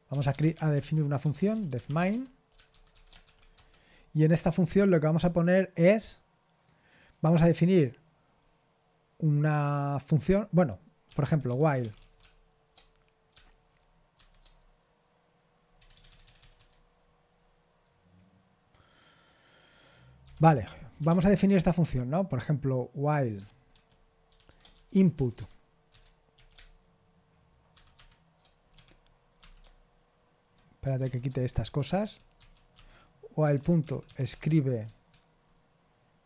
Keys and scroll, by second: 0.0-3.2 typing, 3.5 Return, 11.2-12.3 typing, 15.9 BackSpace, 16.1 BackSpace, 16.2 BackSpace, 21.0 typing, 23.7-26.3 typing, 27.7-34.9 typing.